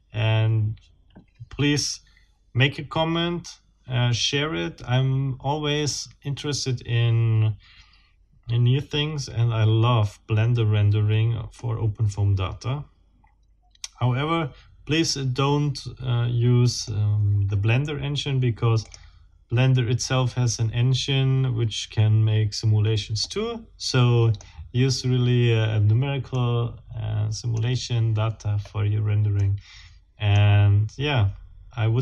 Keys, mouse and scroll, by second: 11.5-17.1 middle drag, 18.9 click, 23.2-24.5 middle drag, 26.3-27.7 middle drag, 28.6 scroll up 1, 29.3-30.5 middle drag.